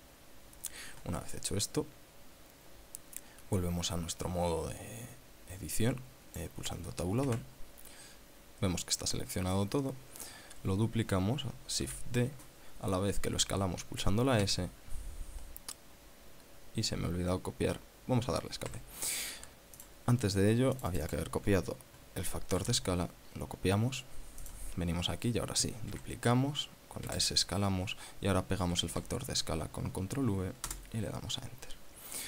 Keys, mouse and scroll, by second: 7.8 Tab, 12.4 shift+d, 15.0 s, 19.2 Escape, 20.4 click, 21.3 click, 23.2 ctrl+c, 25.1 click, 26.5 shift+d, 27.7 s, 29.3 ctrl+v, 31.2 Return.